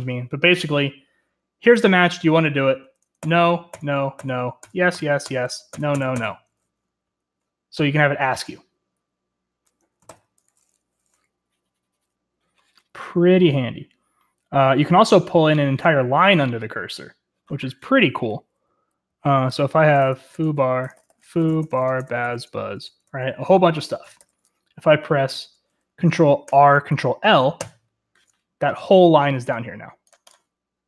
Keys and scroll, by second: 3.0-6.6 typing, 10.0 ctrl+c, 18.0-22.8 typing, 23.1 Escape, 24.2 :, 26.5 ctrl+r, 27.6 ctrl+l.